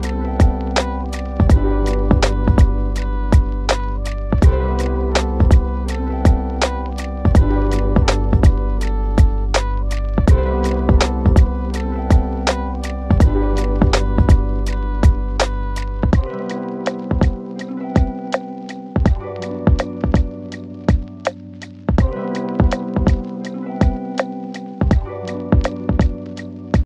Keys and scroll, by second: 20.0 F9.